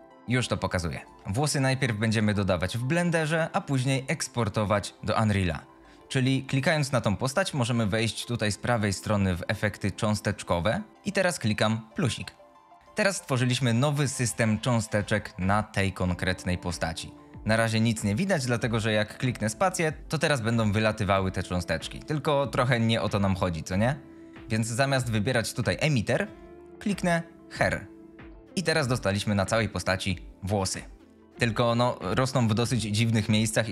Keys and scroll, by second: 19.7 space.